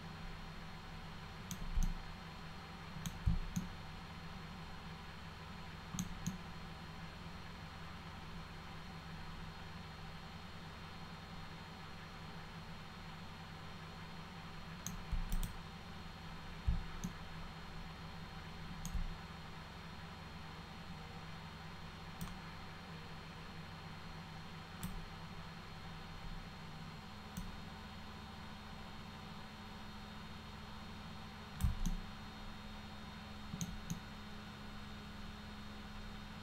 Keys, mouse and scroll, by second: 1.8-3.1 middle drag, 3.6-6.0 alt+middle drag, 6.3-14.9 alt+middle drag, 15.4 click, 17.1-18.9 alt+middle drag, 22.3-24.8 drag, 27.4-31.6 drag, 31.9-33.6 alt+middle drag, 34.0-36.4 alt+middle drag.